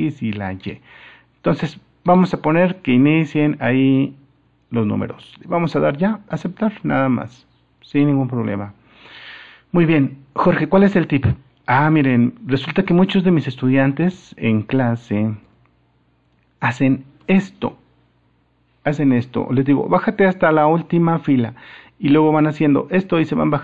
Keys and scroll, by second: 4.4 super+-.